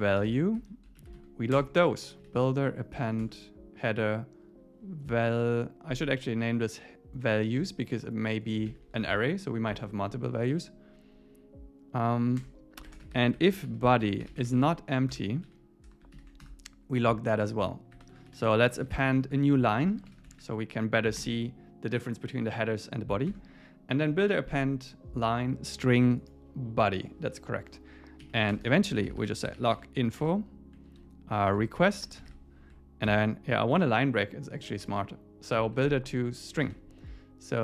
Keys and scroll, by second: 0.6 ↺, 1.0 super+Right, 1.2 Left, 1.6 Return, 3.2 Tab, 5.2 Left, 9.1 super+s, 9.8 ↺, 10.5 Down, 12.4 Return, 15.1 Return, 15.5 Right, 16.1 alt+8, 16.4 Return, 21.2 Return, 23.3 Tab, 28.2 Down, 28.5 Return, 30.2 Return, 33.8 Tab, 34.8 super+s, 36.3 Tab, 36.6 super+s.